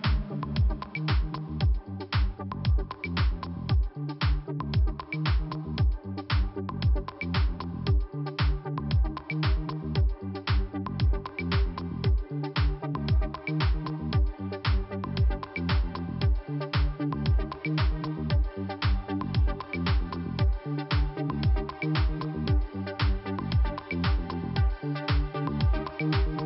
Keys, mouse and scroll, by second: 0.6 scroll up 1, 1.6 click, 3.7 click, 4.6 click, 6.1 click, 6.2 click, 6.7 click, 7.4 click, 9.9 click, 12.4 click, 12.5 click, 13.2 click, 15.1 click, 15.2 click, 15.9 click, 17.8 click, 17.9 click, 19.0 click, 19.1 click, 19.7 click, 22.0 click, 22.0 click, 22.4 click, 22.4 double click, 23.0 double click, 24.6-25.0 scroll down 2.